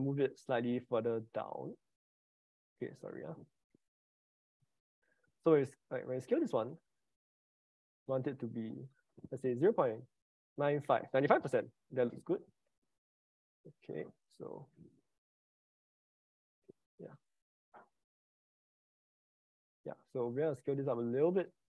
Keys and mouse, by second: 2.5 Escape, 3.5 ctrl+z, 3.8 ctrl+z, 4.6 ctrl+shift+z, 5.9 s, 8.6-11.1 drag, 13.7 click, 15.6 ctrl+z, 16.0 ctrl+z, 17.7 ctrl+z, 20.2 s.